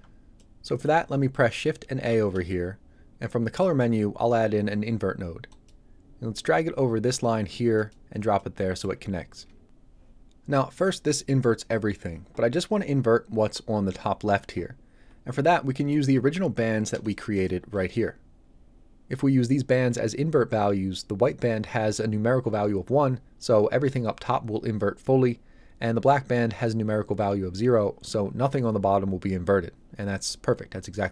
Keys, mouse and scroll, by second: 0.4 middle click, 2.1 shift+a, 5.5 click, 8.4 middle click, 15.7 middle click, 16.1-16.7 scroll down 1, 17.0 ctrl+shift+click.